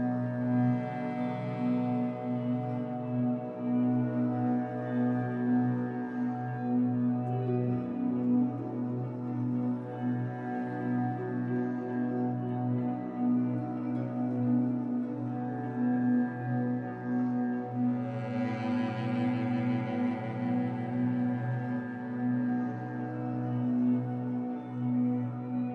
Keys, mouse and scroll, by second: 1.5 shift+middle click, 2.2-5.3 drag, 5.3-6.5 middle drag, 6.5-9.1 drag, 8.9 scroll down 1, 9.1 middle click, 9.4 click, 10.1-11.7 middle drag, 11.4-11.7 scroll up 1, 11.7 click, 12.5 middle click, 13.0-14.0 drag, 14.0 middle click, 14.5 click, 15.2 middle click, 15.9 click, 16.7 middle click, 17.0 click, 17.8 middle click, 18.2-19.8 drag, 19.8 shift+middle click, 20.3-21.8 drag, 21.8-22.8 middle drag, 22.8-25.7 drag.